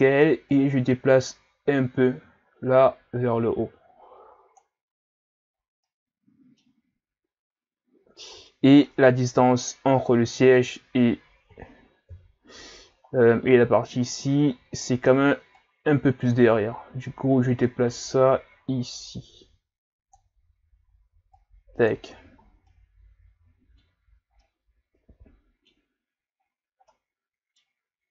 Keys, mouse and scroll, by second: 0.5 click, 5.6 scroll down 1, 5.8-8.0 middle drag, 8.0-8.5 scroll down 1, 8.5-11.5 middle drag, 12.1 KP_3, 13.0-15.5 scroll up 1, 15.5 click, 21.4 click, 22.1 a, 22.4 scroll down 2, 22.7-26.2 middle drag, 26.2-26.9 scroll up 5, 26.9-28.1 middle drag.